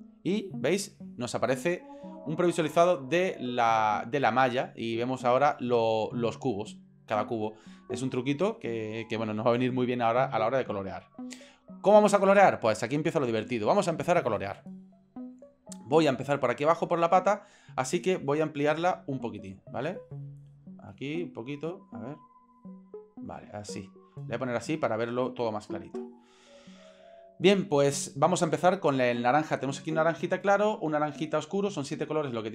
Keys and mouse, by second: 18.5 shift+middle click, 19.2 ctrl+middle click, 20.4 shift+middle click, 21.0 ctrl+middle click, 22.2-23.3 ctrl+middle drag, 23.6-26.0 shift+middle drag.